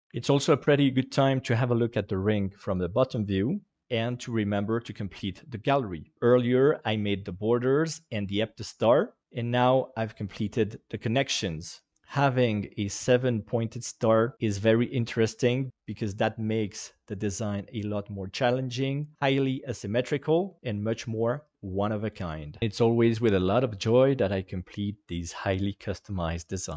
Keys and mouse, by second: 11.9-26.7 middle drag.